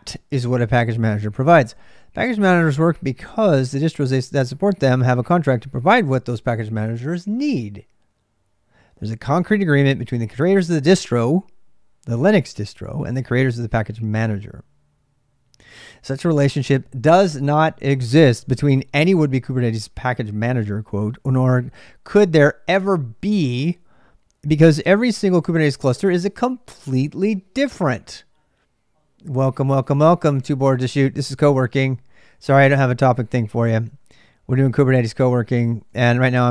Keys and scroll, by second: 0.0-36.5 typing.